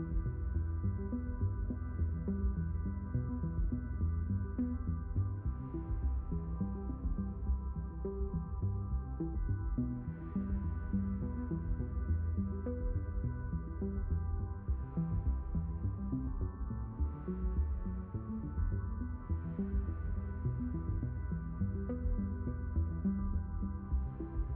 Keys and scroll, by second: 0.6 shift+n, 7.4 shift+n, 15.3 shift+n, 19.1 s, 22.5 ctrl+z.